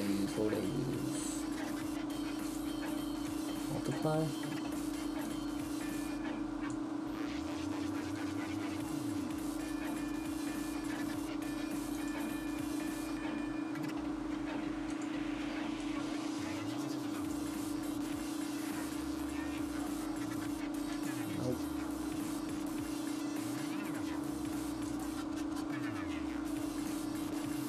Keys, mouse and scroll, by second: 3.9 click, 11.9 click, 18.7-19.4 scroll down 1, 19.4 scroll down 2, 19.4-20.4 scroll up 1, 20.6-21.0 scroll up 2, 21.0 click, 26.9 click.